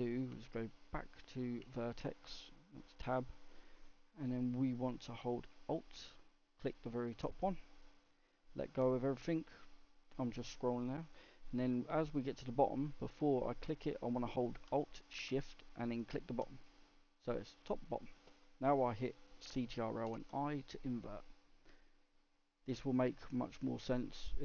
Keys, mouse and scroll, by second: 1.6 Tab, 6.6 alt+click, 7.5-15.9 middle drag, 15.9 alt+shift+click, 16.6-20.0 middle drag, 20.0 ctrl+i, 21.6-24.4 middle drag.